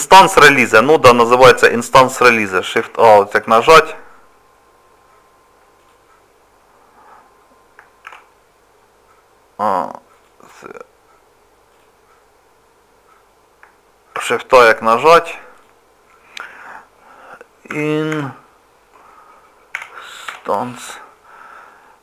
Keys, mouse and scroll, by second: 2.7 shift+a, 5.8 click, 8.0 shift+a, 11.7 click, 14.1 shift+a.